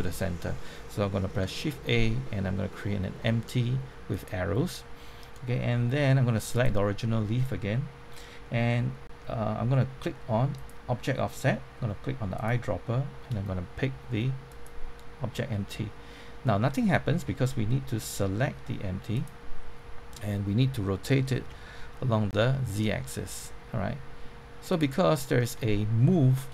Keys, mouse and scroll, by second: 1.6 shift+a, 4.1 click, 4.8-5.3 scroll up 1, 6.5 click, 8.4-10.5 scroll down 1, 10.5 click, 21.3-22.2 typing, 24.7 click, 25.1-26.2 middle drag.